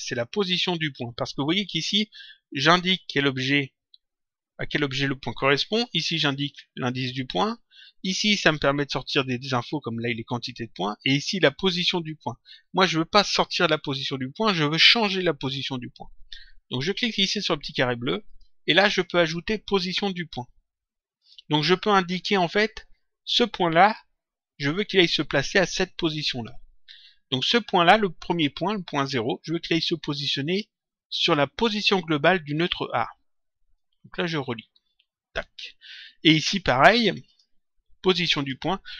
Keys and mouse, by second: 18.2 click, 21.1 click, 33.7 click, 37.2 click, 38.3 click.